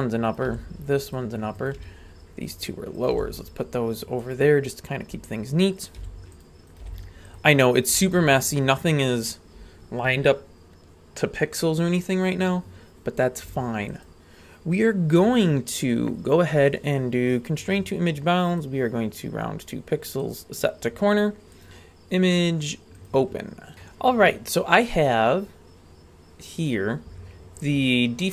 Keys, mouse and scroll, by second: 0.3 right click, 0.4 g, 1.6 right click, 1.8 g, 3.0 right click, 3.1 g, 5.8 right click, 6.0 g, 6.7 right click, 6.8 g, 7.8 right click, 7.9 g, 13.9-17.8 drag, 18.5-20.3 drag, 21.5-23.2 drag, 23.7 shift+middle click, 23.7-27.8 scroll up 6.